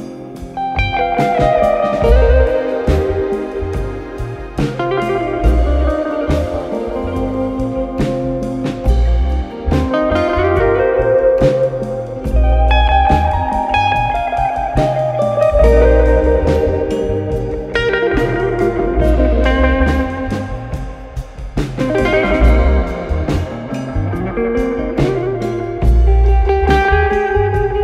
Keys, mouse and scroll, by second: 2.3 click, 3.4 click, 4.0 n, 5.0 click, 6.2 click, 6.4 click, 6.9-7.7 typing, 8.9 click, 9.3 click, 9.4 click, 9.8-14.6 typing, 11.1 Tab, 15.9 click, 15.9-16.4 typing, 17.1 click, 19.2 click, 20.7 click, 23.1 click.